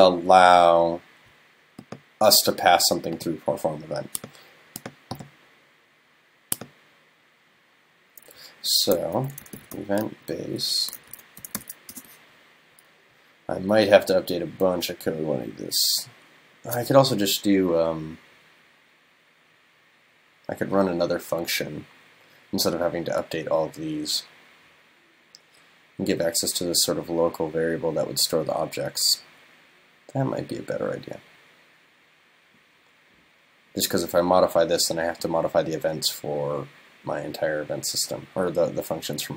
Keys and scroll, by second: 9.2 super+..